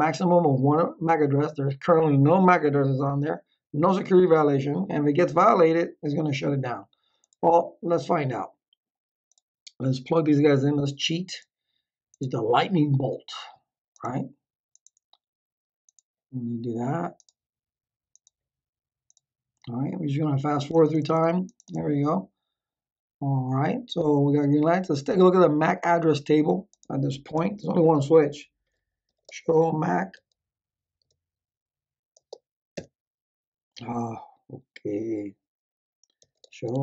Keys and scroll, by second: 27.3 Return, 28.8-30.6 typing, 31.0 Tab, 32.1 space, 32.7 Return, 35.9-36.8 typing.